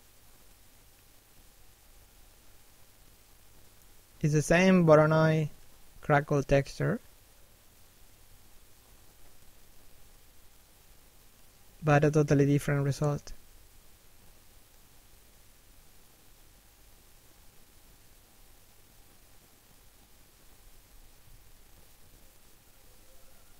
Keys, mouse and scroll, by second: 3.2 middle click, 3.9 middle click, 7.1 click, 9.3 middle click, 10.4 click, 12.7 middle click, 13.6-14.0 scroll down 1, 14.0 middle click, 14.5-14.9 scroll up 1, 14.9 click, 19.7 middle click, 20.3 scroll down 1, 20.7 middle click, 22.1 middle click.